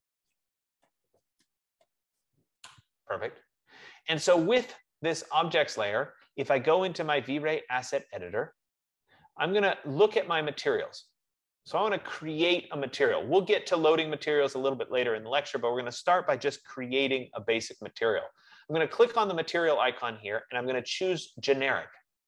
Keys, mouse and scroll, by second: 0.4-2.6 typing, 2.8 Return, 5.4 typing, 8.4 click, 19.5-22.2 drag.